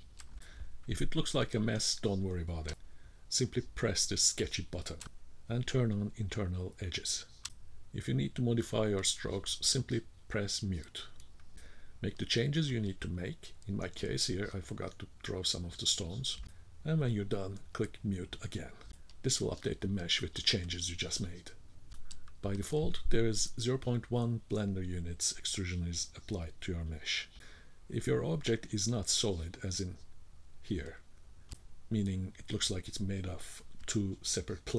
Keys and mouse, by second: 2.3 click, 10.5 click, 11.7 click, 12.9-13.9 drag, 15.1 click, 16.3 click, 17.7 click, 19.2-20.3 drag, 21.5-22.5 drag, 24.5 k, 25.6-27.5 drag, 27.5 middle click, 29.3 middle click, 29.8 shift+middle click, 30.3 middle click, 32.1 middle click.